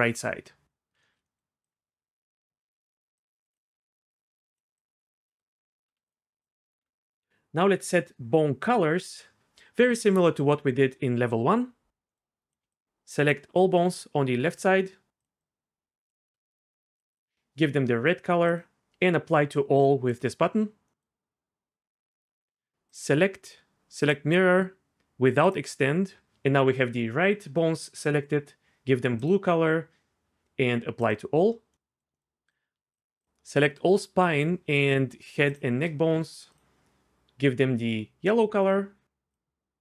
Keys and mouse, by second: 1.6 click, 3.2 shift+click, 4.2 shift+click, 4.8 shift+click, 5.9 Tab, 6.0 click, 6.8 Tab, 12.7 shift+click, 17.1-20.8 drag, 23.0-24.1 drag, 25.4 click, 27.6-29.3 drag, 31.0 click, 34.3 shift+click, 35.5 shift+click, 36.6-38.7 drag, 39.3 click.